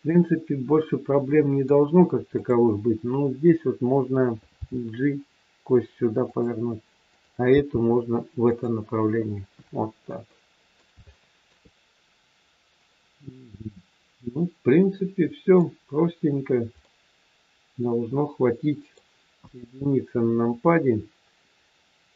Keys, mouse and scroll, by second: 0.0 middle click, 2.3 click, 4.5 g, 7.0 click, 7.4 g, 10.3 middle click, 11.1 shift+middle click, 12.8 middle click, 12.8 scroll up 1, 15.9 scroll down 3, 16.8 middle click, 16.8-17.1 scroll down 1, 19.3 KP_1, 20.4 scroll up 2, 21.5-22.0 scroll down 1, 22.0 click.